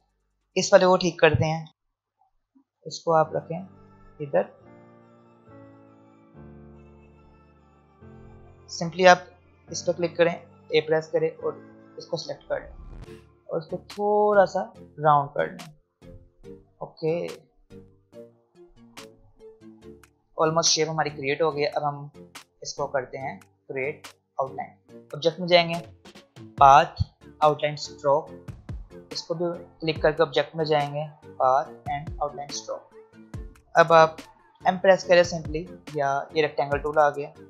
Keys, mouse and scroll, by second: 0.4 click, 1.6 a, 1.7 alt+scroll up 1, 2.3-4.5 drag, 5.8 alt+scroll up 2, 6.7 click, 10.7 a, 11.3 click, 12.6 alt+scroll up 1, 13.5-15.5 drag, 15.5 v, 16.7 alt+scroll down 1, 17.7 click, 18.1-19.0 alt+scroll up 2, 19.0-19.4 alt+scroll up 1, 19.9 alt+scroll down 1, 21.6 space, 21.8 click, 22.1 space, 23.1 click, 34.5 m.